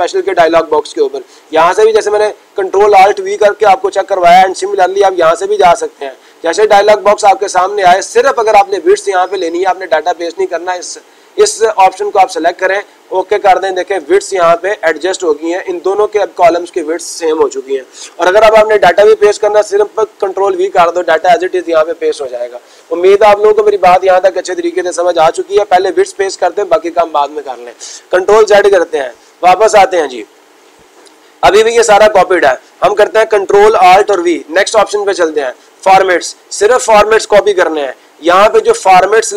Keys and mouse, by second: 3.0-4.0 drag, 4.3-5.3 drag, 5.6-6.6 drag, 8.5-9.5 drag, 12.5-13.6 drag.